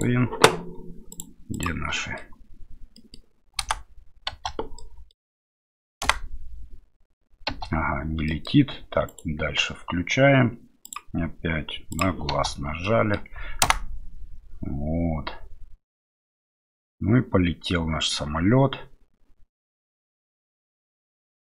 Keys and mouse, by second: 0.0-1.1 right drag, 1.1 click, 1.5 click, 1.9 middle click, 2.9 middle click, 3.6 KP_0, 4.3 space, 4.8 middle click, 6.0 KP_0, 7.5 space, 8.3 middle click, 9.1 right click, 10.8 click, 11.9 click, 12.3 space, 12.8 middle click, 13.6 KP_0.